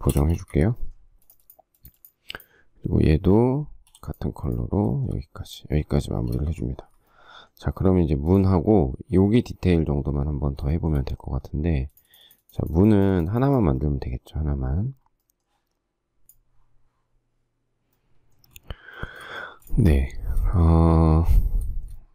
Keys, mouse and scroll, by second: 0.1 space, 0.2 Escape, 0.5 Escape, 3.8 b, 4.8 shift+middle click, 6.0 space, 6.3 space, 6.5 Escape, 10.7 shift+middle click, 19.2 shift+middle click, 19.7 space, 20.2 shift+middle click, 22.0 shift+middle click.